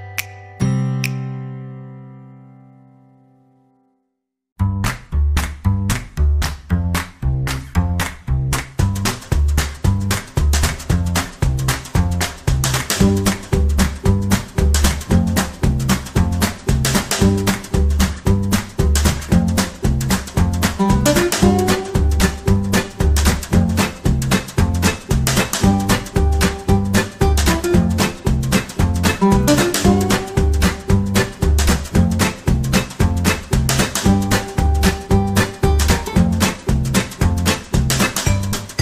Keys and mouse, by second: 0.5 g, 1.9 right click, 2.0 g, 3.1 r, 4.2 g, 5.5 alt+right click, 6.0 f, 6.6 Tab, 7.0-8.1 middle drag, 8.4 KP_3, 9.6 Tab, 13.1 alt+z, 13.6 KP_1, 14.2 alt+z, 14.6 g, 15.2 middle click, 16.0 middle click, 17.4 g, 18.3 KP_3, 20.1 alt+right click, 20.5 g, 22.1 right click, 22.4 g, 23.2 right click, 24.6 g, 25.6 right click, 26.2 g, 26.5 right click, 27.2 middle click, 28.7 click, 31.1 KP_1, 31.8 g, 32.5 middle click, 33.1 KP_3, 33.5 shift+middle click, 34.0 alt+z, 34.4 shift+middle click, 35.2 right click, 35.6 shift+middle click, 37.8 c, 38.7 g.